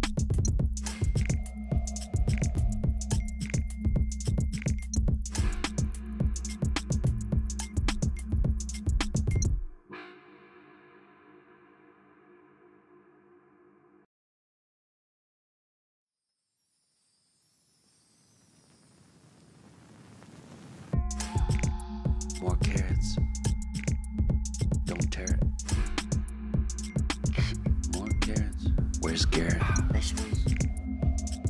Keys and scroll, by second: 20.7 ctrl+z.